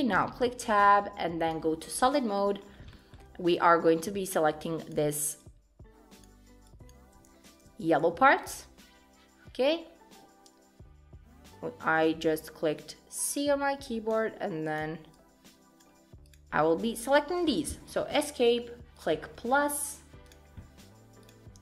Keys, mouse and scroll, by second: 0.0 Tab, 1.5 click, 2.1 shift+middle click, 2.6 scroll up 3, 2.9 shift+middle click, 3.9 click, 5.4 shift+click, 7.7 c, 19.0 click, 20.3 click, 21.3 click.